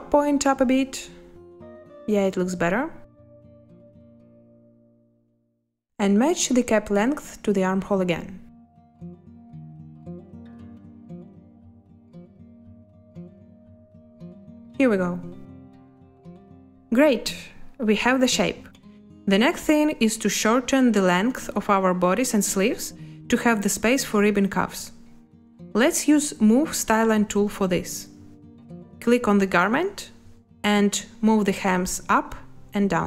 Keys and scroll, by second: 13.1 space, 20.4 space.